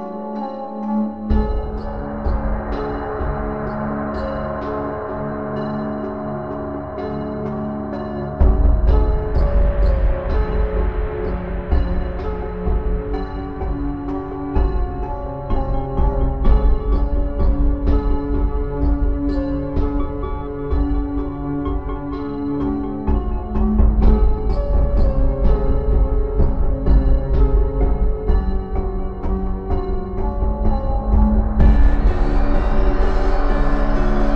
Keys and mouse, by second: 0.1 g, 1.8 click, 2.9 right click, 3.3 g, 4.5 a, 5.2 g, 7.6-9.7 typing, 11.0-14.1 middle drag, 11.6 a, 14.1 KP_3, 16.0 middle click, 16.9 b, 17.8-20.7 middle drag, 20.9 KP_3, 21.9 click, 23.1 middle click, 24.0 click, 24.1-25.2 middle drag, 30.4-32.0 right drag, 31.8-34.0 drag, 34.0 KP_1.